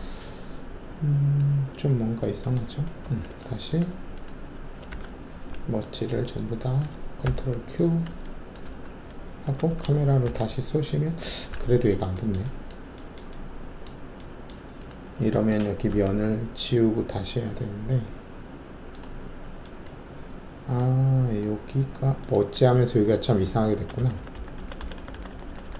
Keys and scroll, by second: 3.0 alt+`, 4.8 alt+w, 5.3 alt+1, 7.2 ctrl+q, 8.6 alt+`, 10.2 ctrl+shift+c, 15.8 alt+3, 23.9 ctrl+z, 24.2 ctrl+z, 24.3 ctrl+z, 24.5 ctrl+z.